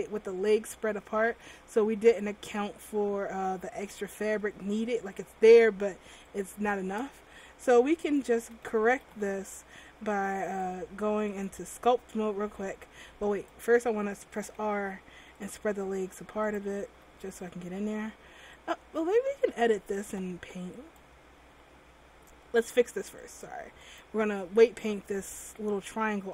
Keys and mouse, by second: 1.6 ctrl+z, 6.5-8.2 drag, 7.7 r, 8.6 a, 8.8 a, 9.3 alt+r, 14.5 r, 16.6 right click, 17.1 r.